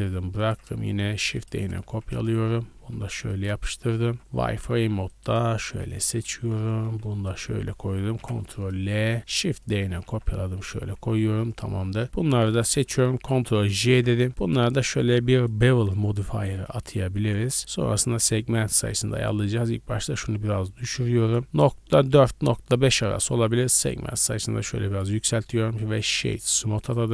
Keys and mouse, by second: 1.1 shift+d, 1.5 r, 2.7 g, 2.9 click, 3.2 ctrl+middle click, 3.6 Tab, 4.0-5.8 typing, 4.2 middle click, 5.5 middle click, 5.6-9.2 drag, 8.1 ctrl+l, 9.2 shift+d, 9.7 g, 10.3 ctrl+click, 11.1 Tab, 11.1-12.5 middle drag, 12.5 shift+click, 12.7-14.3 shift+middle drag, 13.6 ctrl+j, 14.3 click, 14.6 middle click, 14.7-19.2 drag, 25.3 w, 26.7 click, 26.7 right click.